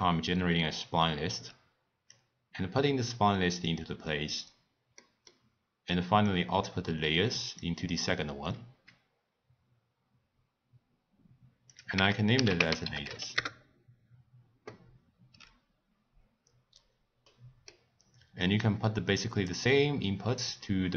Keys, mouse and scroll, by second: 2.1 drag, 5.0-6.2 middle drag, 6.2 click, 11.7-16.6 drag, 17.2-18.4 middle drag, 18.4 click, 20.3 click.